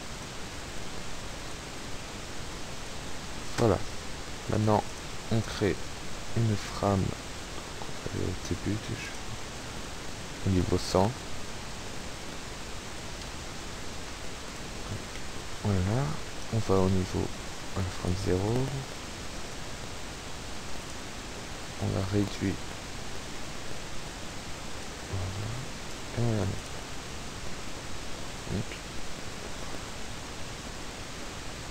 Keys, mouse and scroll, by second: 0.5 Tab, 1.5-3.1 drag, 1.5-2.4 typing, 4.5 click, 5.4 click, 9.1 click, 9.9 click, 11.4 click, 14.2 i, 15.2 click, 16.1 click, 18.1 click, 20.9 click, 21.8-25.1 drag, 22.7 ., 22.7 KP_0, 22.9 KP_1, 25.5 i, 26.7 click, 27.2 KP_0, 28.1 shift+a, 30.0 alt+a.